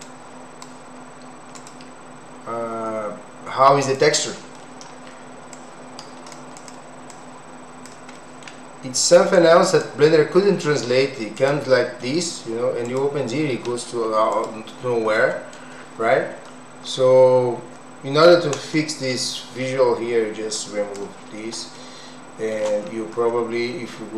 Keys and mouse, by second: 0.0 click, 1.6-4.0 drag, 4.6 middle click, 5.7 click, 6.6 click, 7.2 click, 8.2 middle click, 9.4 click, 11.4 click, 12.9 click, 15.3 middle click, 20.6 click, 21.7 shift+middle click.